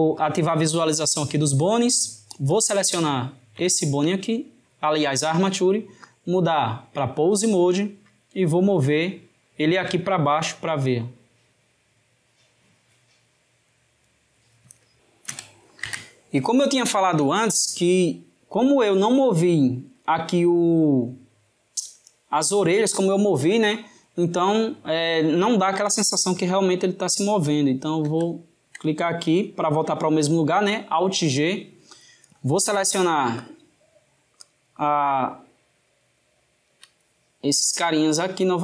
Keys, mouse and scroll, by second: 0.2-2.7 drag, 3.2-6.1 ctrl+middle drag, 6.1-9.1 drag, 24.1-27.1 right drag, 28.1 alt+g, 32.8-34.5 drag, 35.9 shift+click, 38.2-38.6 drag.